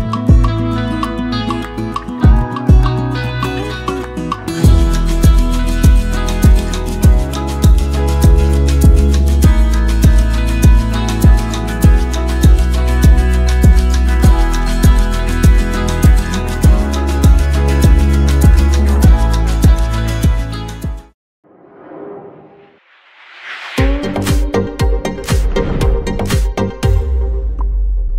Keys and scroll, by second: 18.1-21.9 typing.